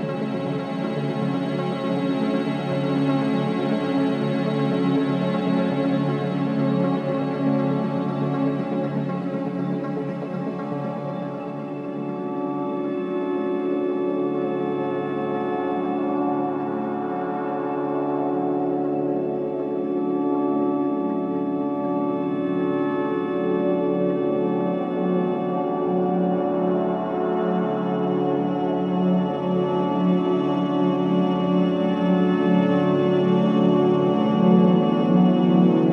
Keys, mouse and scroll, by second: 0.3 alt+click, 0.7 click, 1.4 alt+middle click, 1.7 click, 4.4-6.5 right drag, 6.5-9.2 shift+right drag, 9.2-10.8 drag, 10.8 ctrl+z, 11.8 ctrl+z, 13.4 w, 15.6 ctrl+b, 18.6 click, 21.6 click, 23.0 w, 24.5-30.6 drag, 30.6 right click, 31.6 click, 32.1 alt+click, 32.5 alt+right click, 33.0-35.9 alt+drag.